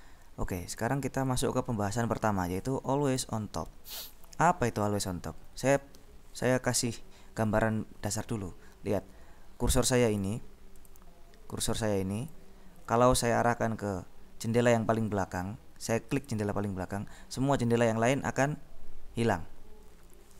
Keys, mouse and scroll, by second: 0.7-3.1 drag, 3.4 ctrl+b, 4.1 click, 10.5 click, 10.8 click, 16.5 click.